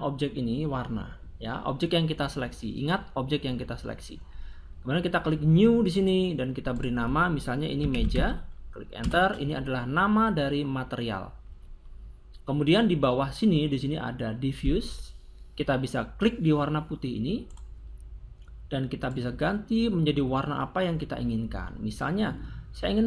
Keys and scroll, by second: 7.5 m, 7.8 e, 8.0 j, 9.0 Return.